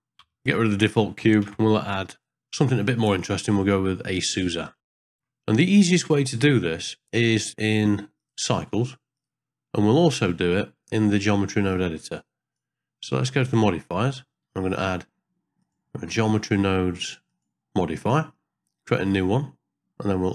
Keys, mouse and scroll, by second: 0.2 x, 1.4 shift+a, 4.8 shift+middle click, 4.9 middle click, 5.1 shift+middle click, 8.2-9.3 drag, 11.7 click, 15.6-17.4 drag, 19.1 click.